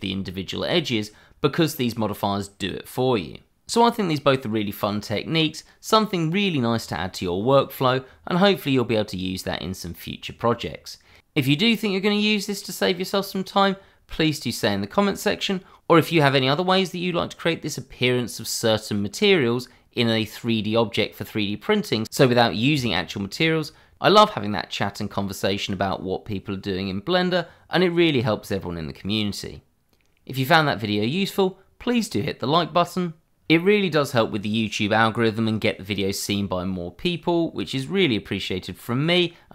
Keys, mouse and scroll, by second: 4.1 h, 27.3 h.